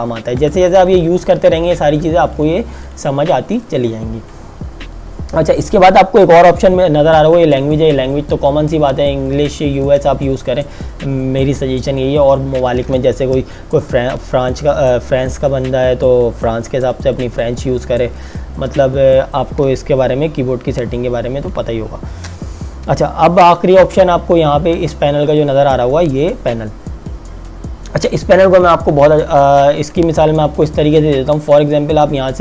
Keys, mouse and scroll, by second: 2.4 click, 12.2 click, 18.7 Delete, 19.8 click, 20.2 space, 21.4 space, 25.2 click, 30.9 click.